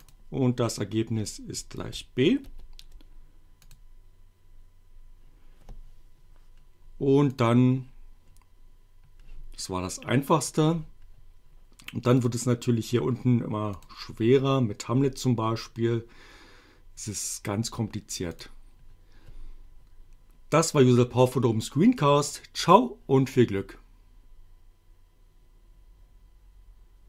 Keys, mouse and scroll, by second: 0.1 click, 2.2 shift+b, 3.6 click, 7.3 click, 10.5 click, 12.2 click, 13.8 click, 18.3 click.